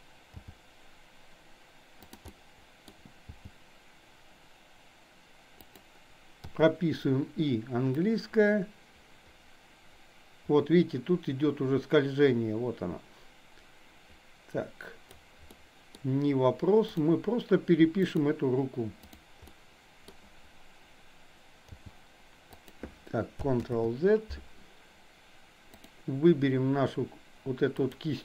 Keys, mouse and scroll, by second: 0.4 g, 2.2-2.9 middle drag, 3.2 g, 6.4 i, 8.0-15.1 drag, 15.5-16.0 middle drag, 18.0 click, 19.5-20.1 middle drag, 21.7 g, 23.7 ctrl+z, 27.9 drag.